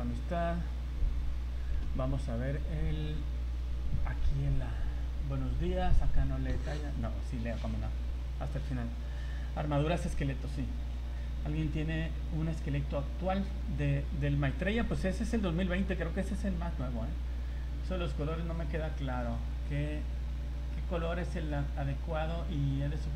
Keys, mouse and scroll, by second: 3.3 scroll down 3, 22.8 scroll down 3.